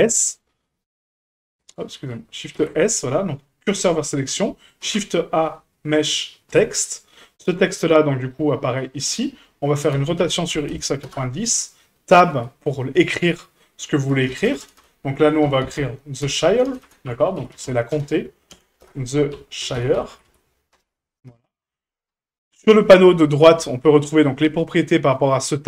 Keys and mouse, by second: 0.1 shift+d, 1.9 ctrl+z, 2.5 shift+s, 4.8 shift+a, 8.2-9.2 middle drag, 9.9 r, 12.3 Tab, 14.1-18.5 typing, 18.8 Return, 19.6-20.2 typing, 21.3 Tab, 23.0 drag.